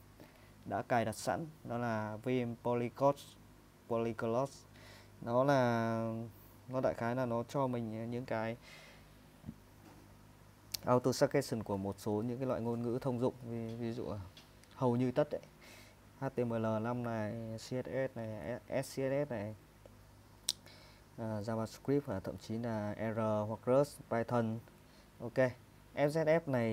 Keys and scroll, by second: 8.3 Down, 8.5 Down, 8.8 Down, 9.1 Down, 9.9 Up, 11.8 Right, 12.1 Down, 12.4 Down, 12.9 typing, 16.1 typing, 17.9 Page_Down, 18.6-19.4 typing, 19.9 Up, 24.4 Page_Down, 24.8 Page_Up.